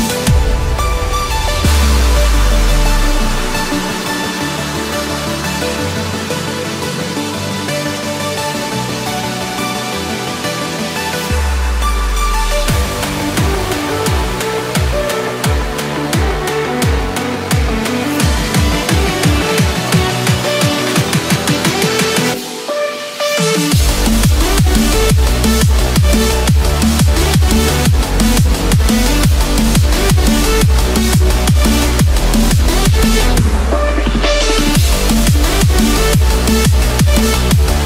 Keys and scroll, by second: 0.8 Return, 1.4 Escape, 8.3 Return, 8.8 Escape, 11.5 Escape, 12.5 ctrl+-, 12.8 ctrl+0, 14.1 ctrl+=, 14.3 ctrl+space, 18.5 Return, 21.7 Return, 22.4 Escape, 25.0 Return, 25.6 Escape, 26.4 ctrl+-, 31.8 ctrl+-, 33.9 ctrl+=.